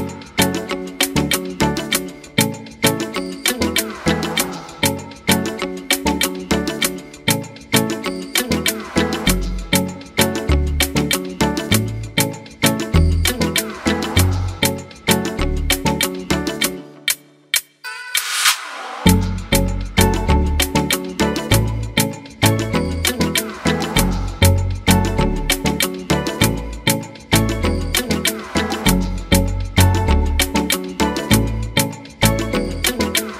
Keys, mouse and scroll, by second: 0.5 ctrl+a.